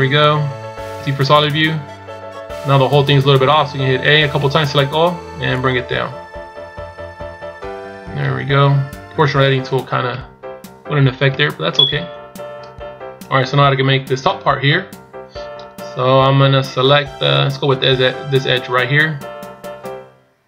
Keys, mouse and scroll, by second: 1.5-2.4 scroll down 2, 2.4-3.9 scroll up 1, 3.9 a, 5.5 click, 12.1-13.5 shift+scroll up 7.